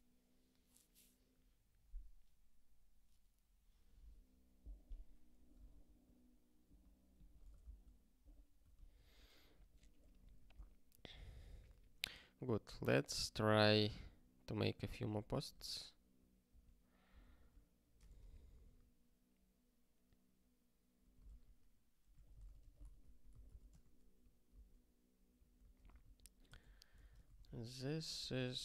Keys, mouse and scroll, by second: 8.7 ctrl+k, 9.8 click, 10.4 ctrl+s, 13.4 ctrl+j, 15.1 super+w, 15.5 super+b, 17.3 ctrl+j, 18.0 shift+c, 23.7 c, 24.6 Return, 25.5 ctrl+e, 25.8 alt+b, 25.9 alt+b, 26.4 alt+d, 26.9 alt+d, 27.0-28.6 typing.